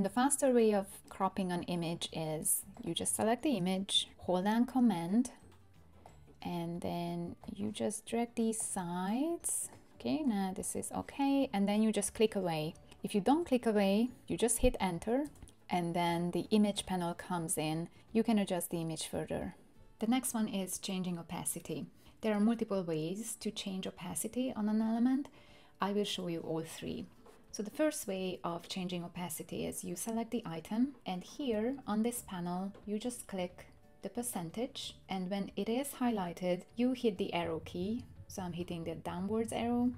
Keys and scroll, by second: 15.2 Return, 37.4 Page_Down, 37.6 Page_Down, 37.8 Page_Down, 37.9 Page_Down, 38.1 Page_Down, 38.3 Down, 38.6 Down, 38.8 Down, 39.0 Down, 39.3 Down, 39.4 Down, 39.6 Down, 39.8 Down, 39.9 Down.